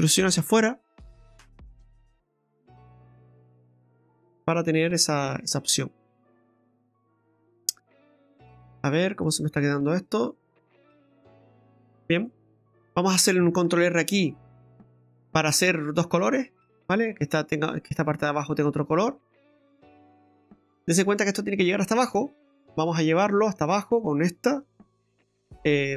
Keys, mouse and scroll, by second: 0.4 e, 3.4 click, 4.7 scroll down 1, 4.9 middle click, 5.8-6.4 scroll up 1, 8.1 scroll down 2, 8.7 right click, 9.0 scroll down 1, 9.2 middle click, 13.7 ctrl+r, 15.3 middle click, 16.7 middle click, 19.4 middle click, 19.4-19.7 scroll down 2, 19.7 middle click, 20.2 shift+middle click, 20.4 middle click, 20.4-20.8 scroll down 1, 21.7 middle click, 22.1 shift+middle click, 22.5-23.1 scroll up 5, 23.3 middle click, 23.9 right click, 24.7 Tab.